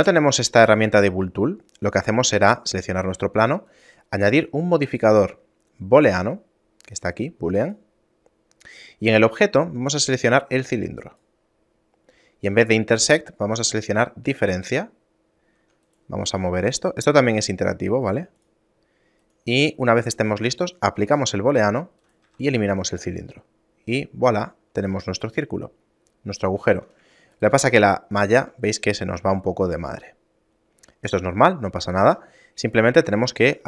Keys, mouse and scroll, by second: 0.1 ctrl+z, 0.9 right click, 3.8 click, 9.2 click, 12.6 click, 16.0 right click, 16.4 g, 19.3 right click, 20.9 click, 22.1 right click, 22.4 x, 23.4 shift+middle click, 25.2 shift+middle click, 26.8 Tab, 27.4 right click, 27.6 Tab, 28.1 shift+middle click, 28.9-29.6 scroll up 2, 29.6 shift+middle click.